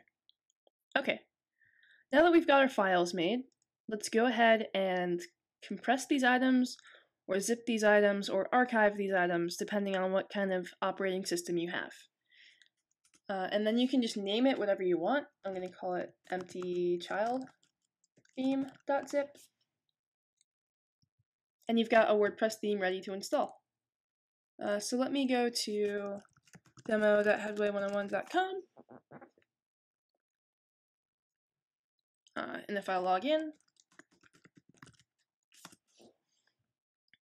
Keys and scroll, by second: 15.1-19.2 typing, 20.2 typing, 25.9-28.1 typing, 30.1 m, 33.5-36.2 typing.